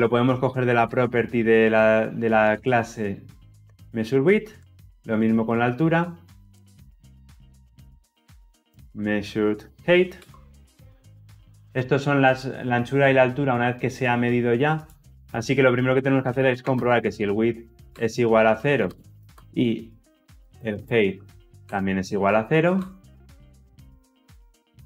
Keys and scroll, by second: 9.9 Return, 17.6 Return.